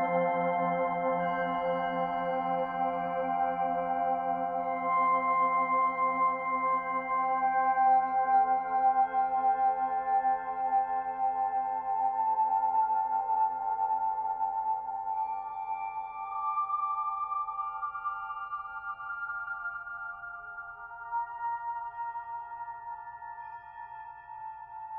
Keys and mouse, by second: 1.9 click, 5.1 g, 6.2 click, 8.5 i, 9.7 click, 11.9-13.5 drag, 13.6 Delete, 14.1 click, 14.9 shift+d, 17.5 shift+click, 19.6-20.6 drag, 21.7 click, 22.7 h, 23.4-24.9 drag.